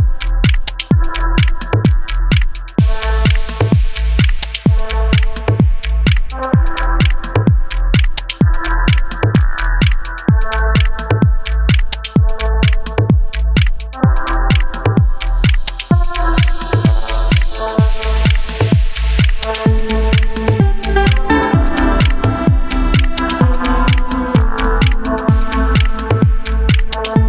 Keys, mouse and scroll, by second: 0.0 scroll up 1, 0.0 middle click, 0.1 Tab, 0.2 scroll down 2, 0.4 3, 0.5 middle click, 0.5 alt+drag, 0.7-1.2 shift+middle drag, 1.2 scroll up 2, 1.4 alt+shift+click, 1.5-2.1 shift+middle drag, 2.1 alt+shift+click, 2.1-2.8 middle drag, 3.3 scroll down 4, 3.3 shift+middle click, 3.6-5.3 typing, 3.8 scroll up 3, 6.6 s, 7.1 Tab, 7.2-7.5 middle drag, 7.5 scroll up 2, 7.6 middle click, 7.8 Tab, 7.8 2, 7.9 middle click, 8.1 middle click, 8.3 click, 8.4 shift+middle click, 8.6 scroll up 1, 8.7-9.1 middle drag, 9.1 g, 9.3 shift+click, 9.6-9.9 middle drag, 9.9 g, 10.1 middle click, 10.2 g, 10.5 Tab, 10.6-11.0 middle drag, 11.0 a, 11.1 middle click, 11.2 scroll up 4, 11.3 click, 11.4 shift+middle click, 11.6 middle click, 11.9 scroll up 1, 12.1 click, 12.1 middle click, 12.3 KP_3, 12.4 g, 13.0 1, 13.2 click, 13.3 g, 13.5 Tab, 13.6 scroll down 7, 13.7 shift+middle click, 13.9-14.3 shift+middle drag, 14.3 scroll up 2, 14.6 shift+middle click, 15.0 scroll up 1, 15.1 middle drag, 15.4 alt+click, 15.5 alt+shift+click, 15.6-16.4 middle drag, 16.4 shift+click, 16.4-16.7 middle drag, 16.7 shift+click, 16.9-17.9 shift+middle drag, 17.9 alt+shift+click, 18.1 middle click, 18.6 middle drag, 18.7 shift+click, 18.8 middle click, 19.2 ctrl+e, 19.4-19.8 shift+middle drag, 19.8 alt+click, 19.9 middle drag, 20.2 alt+shift+click, 20.2 middle drag, 20.4 alt+shift+drag, 20.5 alt+shift+click, 20.6 middle drag, 20.7 scroll up 2, 20.8 alt+shift+drag, 20.9 scroll down 3, 21.0-21.7 shift+middle drag, 21.7 ctrl+e, 21.9-23.4 shift+middle drag, 23.4 alt+click, 23.5 middle click, 23.7 scroll up 1, 23.7-24.4 middle drag, 24.4 click, 24.5 g, 24.9 click, 25.2-25.5 shift+middle drag, 25.5 click, 25.6 middle click, 25.7 g, 26.0 click, 26.1 g, 26.2-27.2 shift+middle drag, 27.2 2.